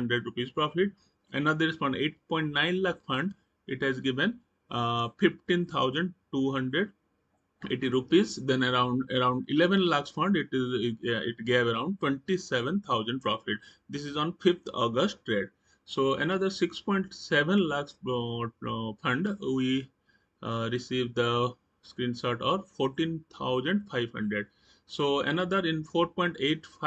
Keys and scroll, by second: 0.3 Right, 7.6 Right, 15.3 Right, 24.3 Right.